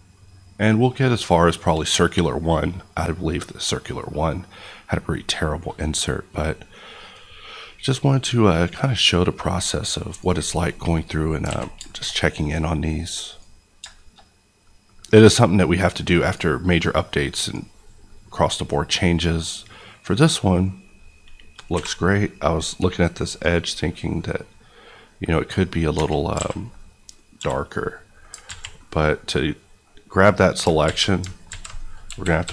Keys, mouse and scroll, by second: 7.1 click, 11.0-11.4 scroll up 2, 11.4 alt+a, 11.8 shift+middle click, 13.2 click, 13.9 shift+middle click, 14.9-15.2 scroll up 1, 15.2 middle click, 16.2 click, 16.5 scroll down 1, 16.8 middle click, 17.4 click, 17.7 KP_Decimal, 18.0 middle click, 18.3 scroll down 1, 18.6-20.2 middle drag, 21.7 n, 22.4 middle click, 23.2 click, 24.1 middle click, 25.9 Tab, 26.3 alt+a, 27.3 l, 27.7 middle click, 28.4 alt+z, 28.7 middle click, 30.8 alt+z, 32.0 KP_1, 32.4 KP_5.